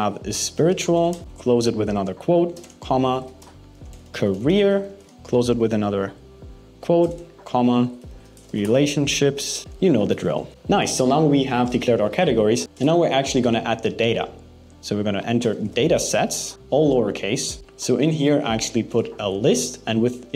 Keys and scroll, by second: 1.2 shift+', 7.4 shift+', 9.6 shift+', 12.2 BackSpace, 18.2 alt+6, 18.6 BackSpace, 18.9 alt+5.